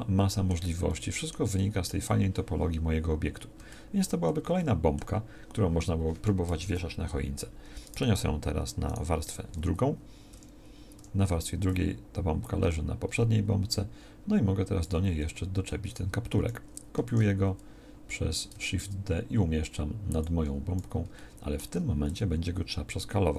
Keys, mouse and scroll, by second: 6.6 KP_1, 9.2 m, 11.0 2, 17.1 shift+d.